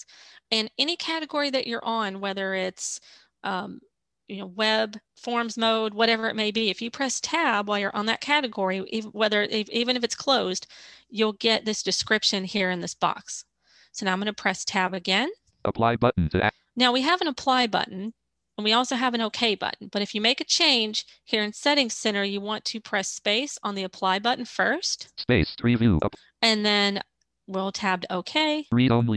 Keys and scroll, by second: 14.0 Tab, 22.8 space, 27.4 Tab.